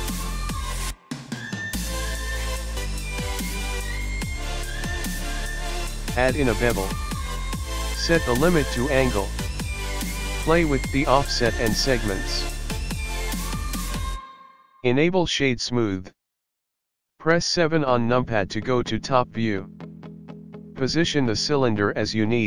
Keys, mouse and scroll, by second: 0.7 click, 0.9 click, 1.1 middle click, 1.6 click, 1.7-2.0 scroll down 4, 2.0 middle click, 3.3 scroll up 1, 4.7 KP_1, 4.8 Tab, 4.8 click, 5.6 click, 6.9 click, 7.5 scroll down 6, 7.8 scroll up 4, 8.0 click, 8.4-9.2 scroll up 1, 9.3 click, 10.0 click, 11.4 click, 11.8 click, 12.5-13.1 scroll up 3, 12.5 KP_1, 12.9 click, 13.1 click, 13.3 middle click, 13.3 scroll down 2, 14.2-15.5 scroll down 3, 14.6 click, 17.0 KP_7, 17.9 click, 20.3 g.